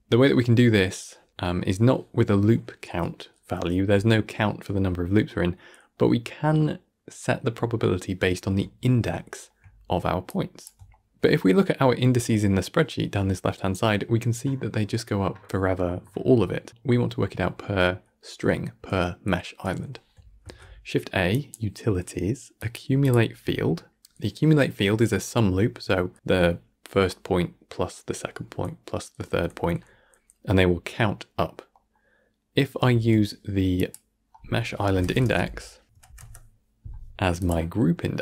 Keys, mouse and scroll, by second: 0.8-8.6 middle drag, 8.6-8.9 scroll up 3, 8.9-10.4 shift+middle drag, 10.4 click, 11.0-13.9 shift+middle drag, 14.5-16.0 scroll down 87, 16.0-17.8 scroll up 141, 17.8 click, 18.1-19.7 middle drag, 20.5 shift+a, 23.5-23.8 scroll up 2, 23.8-27.5 middle drag, 31.8-33.0 middle drag, 33.0 shift+a, 36.0 Down.